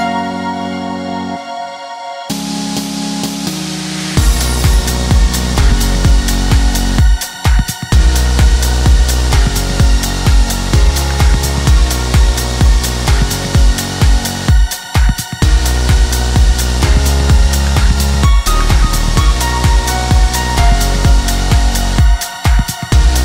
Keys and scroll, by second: 10.4 Escape.